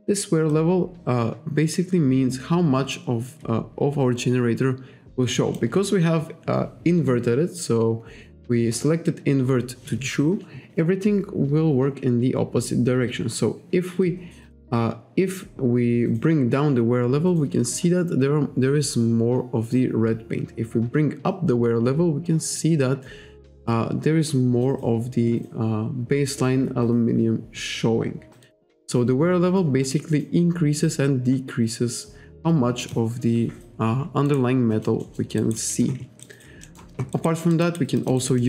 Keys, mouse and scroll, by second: 0.5 click, 14.1 click, 28.5 click, 34.3 alt+right click, 34.7 alt+click, 35.0 alt+middle click, 35.4 alt+right click, 35.6 alt+click, 36.3 alt+right click, 36.7 alt+middle click, 37.2 alt+right click, 37.7 alt+right click, 38.0 alt+click, 38.2 alt+right click, 38.4 alt+middle click.